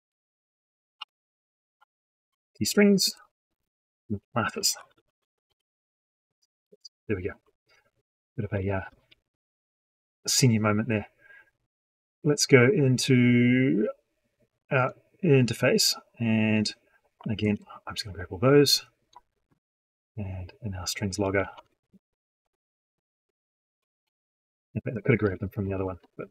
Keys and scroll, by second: 17.3 ctrl+c, 21.5 ctrl+v, 25.3 ctrl+shift+Left, 25.9 ctrl+c.